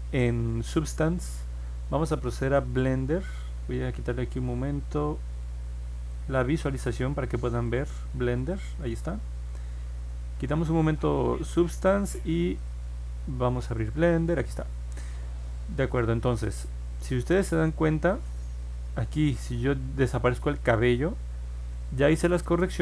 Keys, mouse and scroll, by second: 2.3 click, 6.1 click, 7.6 click, 8.3 click, 12.5 click, 15.3 click, 16.2 middle click, 17.4 click, 20.4 click, 22.3 click.